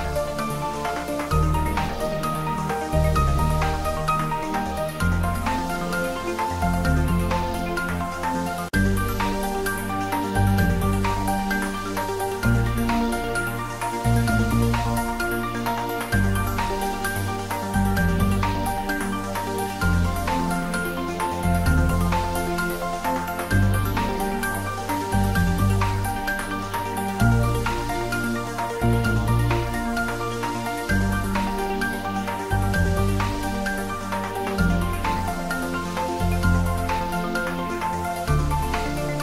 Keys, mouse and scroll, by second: 0.4 shift+click, 0.9 shift+middle click, 1.2 Tab, 1.7 ctrl+a, 2.0 click, 2.1 click, 2.3 Tab, 2.8 ctrl+b, 5.7 click, 5.8 Tab, 6.1 ctrl+middle click, 7.0 click, 8.1 ctrl+middle click, 9.0-10.9 typing, 10.2 click, 13.3 click, 13.3-14.2 typing, 14.6 click, 15.2-17.9 typing, 16.6 click, 20.3 click, 20.4-21.3 typing, 22.8 click, 22.9 s, 24.4 y, 25.7 click, 28.1 g, 29.0 click, 29.3 Tab, 30.0 ctrl+r, 30.7 click, 31.5 ctrl+r, 31.9 click, 32.7 click, 33.3 ctrl+r, 33.8 click, 34.7 middle click, 35.4 shift+click, 37.3 click, 37.8 g, 38.1 z.